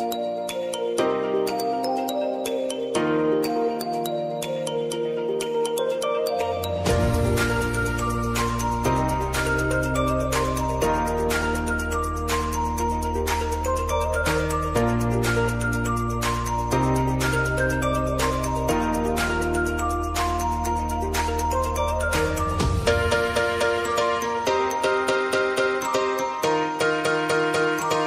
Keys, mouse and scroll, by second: 4.3 ctrl+a, 5.7 4, 7.5-13.4 drag, 15.6-25.5 drag, 27.2 space.